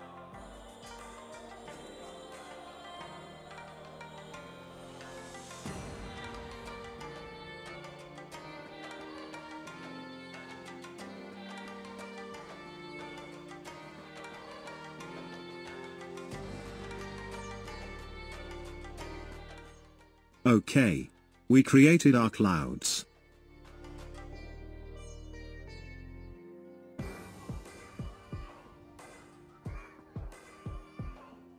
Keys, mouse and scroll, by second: 1.0 Tab, 2.2 click, 3.9 click, 4.3 Tab, 4.8 click, 5.6 g, 6.5 middle click, 7.5 g, 9.8 KP_0, 10.2 click, 10.5-11.2 scroll down 1, 11.2-14.1 drag, 14.1 middle click, 14.9-17.7 drag, 17.7 g, 18.5 KP_0, 19.0-20.6 drag, 23.6 click.